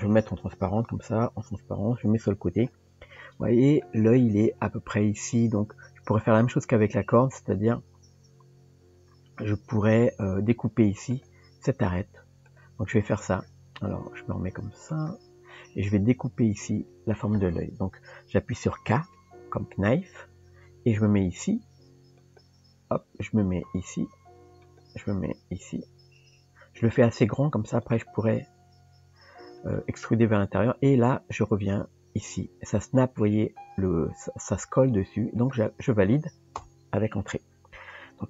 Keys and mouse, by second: 0.0 click, 1.7 KP_3, 3.8 shift+middle click, 11.9 click, 12.5 click, 15.0 click, 19.1 k.